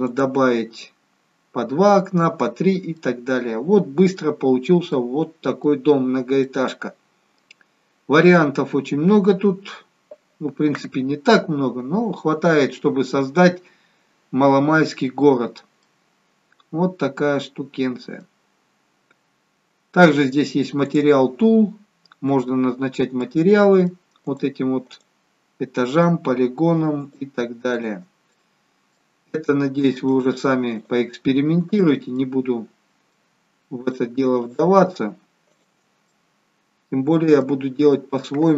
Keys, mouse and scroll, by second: 0.0 click, 2.5-2.9 scroll down 1, 2.9 middle click, 4.4-5.0 scroll up 3, 5.0 middle click, 6.2 scroll down 2, 6.5 middle click, 8.2-8.6 scroll down 1, 15.5-15.8 scroll up 1, 15.8 middle click, 20.8 click, 22.5-23.2 scroll up 2, 23.2 middle click, 24.5 click, 24.9 click, 27.0 shift+click, 27.2 shift+click, 27.7 click, 28.3 middle click, 29.3 middle click, 30.0 shift+click, 30.8 shift+click, 32.1 middle click, 33.8 shift+click, 34.4 shift+click, 36.1 middle click, 38.0-38.5 scroll down 2.